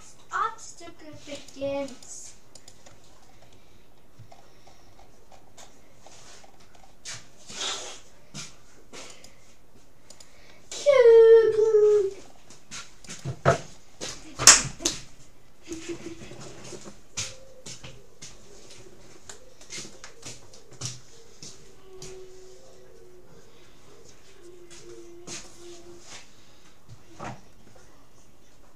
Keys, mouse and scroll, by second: 1.4-4.2 right drag, 3.2 middle click, 4.4-8.8 middle drag, 7.6-11.8 right drag, 11.0-13.6 middle drag, 13.2-14.8 right drag, 14.6-16.6 middle drag.